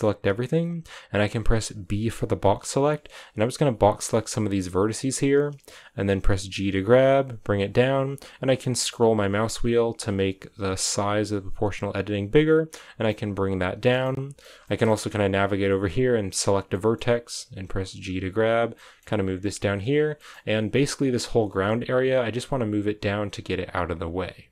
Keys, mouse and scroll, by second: 4.6 b, 4.8-5.5 scroll down 2, 5.5-6.5 scroll up 1, 6.5 scroll up 1, 6.5 g, 8.9-13.0 drag, 13.0-14.8 middle drag, 14.8-16.0 scroll up 2, 16.0 right click, 16.6 middle click, 17.6 g, 18.7 middle click, 19.1 g, 19.9 right click, 20.1 middle click, 20.4 g, 21.4 right click, 21.4 g, 23.2 right click, 23.5 g, 23.8 right click, 23.9 g.